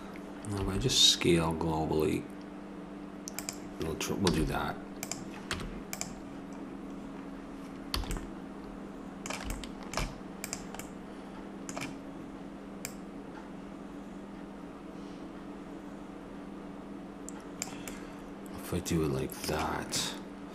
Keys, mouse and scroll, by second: 0.6 s, 4.3 z, 5.5 Tab, 8.0 a, 10.4-12.8 right drag, 12.8-14.7 drag, 17.9-20.1 middle drag.